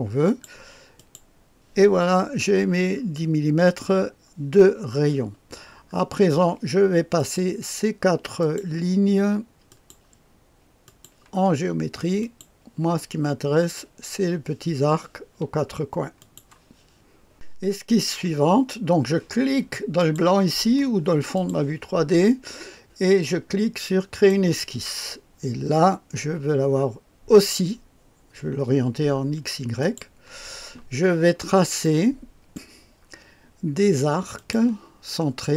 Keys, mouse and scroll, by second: 0.2-1.7 drag, 2.9-4.0 scroll up 1, 4.0-4.8 scroll down 1, 4.8-5.9 scroll down 1, 5.9-7.1 scroll up 2, 7.1 click, 8.4 click, 9.7 click, 10.8 click, 12.2 click, 16.2 click, 17.3 click, 20.0 click, 21.3 click, 24.1 click, 29.8 click, 31.3 scroll down 1, 31.8 right click, 34.3 click.